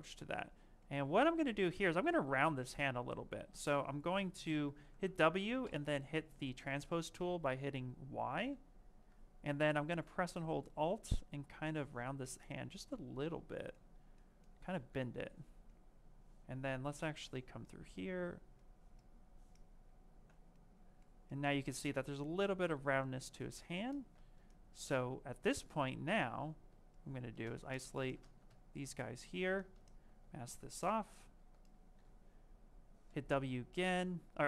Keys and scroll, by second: 13.0 q.